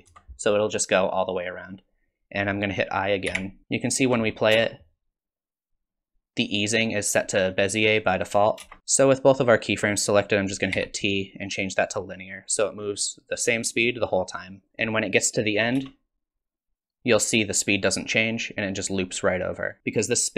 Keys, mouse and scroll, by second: 3.3 i, 3.6 click, 4.5 space, 8.6 space, 10.7 t, 14.3 click, 15.8 space, 18.2 click.